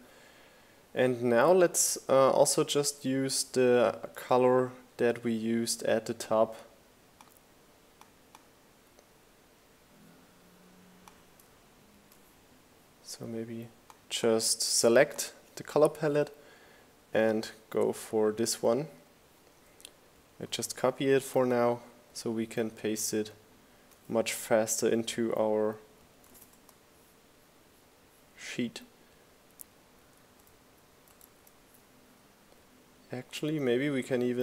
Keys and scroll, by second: 18.3 super+c, 24.4 super+v, 24.8 Return, 29.1 super+c.